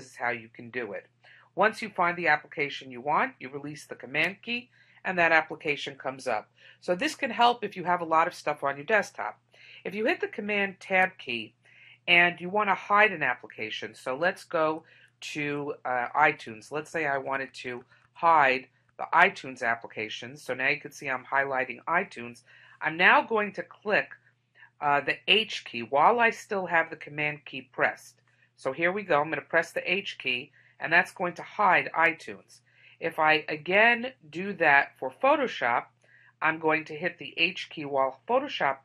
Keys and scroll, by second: 10.9 super+Tab.